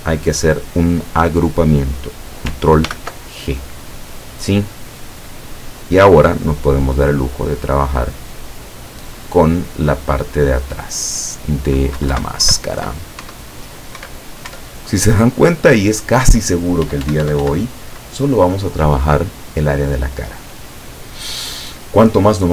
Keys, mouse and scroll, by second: 2.9 ctrl+g, 4.8-11.2 drag, 12.1 Left, 13.3 Up, 14.1 Right, 14.6 Up, 16.9 Up.